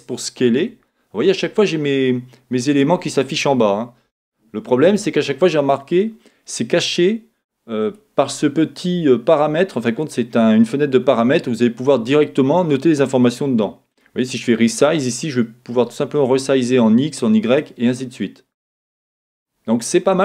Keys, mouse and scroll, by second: 4.4 middle click, 7.8-9.0 drag, 9.6 click, 13.9 click, 15.3-17.6 drag, 17.7 click.